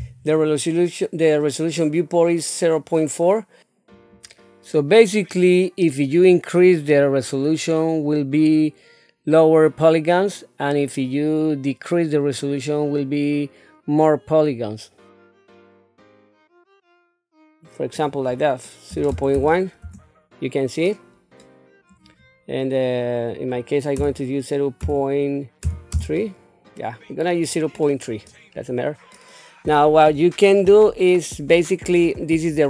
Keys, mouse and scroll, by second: 14.6 scroll up 3, 15.5 shift+middle click, 16.4 scroll up 1, 17.9-19.8 drag, 21.9-25.9 drag, 28.0-28.7 scroll down 3, 30.2 shift+middle click, 31.1 scroll up 2.